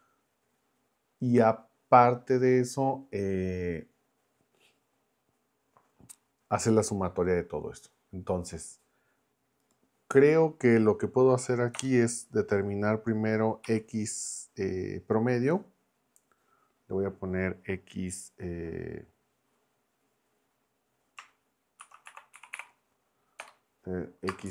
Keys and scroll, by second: 11.8 BackSpace, 13.6 x, 21.5-24.5 typing.